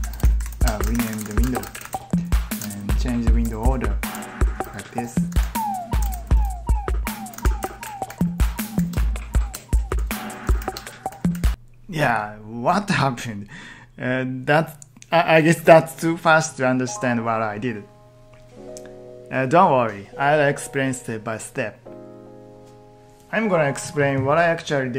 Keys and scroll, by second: 0.1-0.8 typing, 1.0 ctrl+t, 1.3 ctrl+t, 1.9 ctrl+t, 2.6 ctrl+shift+Left, 2.8 ctrl+shift+Left, 3.3 ctrl+shift+Right, 3.5 ctrl+shift+Right, 4.0 ctrl+shift+Left, 4.5 ctrl+shift+Right, 5.2 ctrl+t, 6.0 ctrl+shift+Left, 7.2 ctrl+t.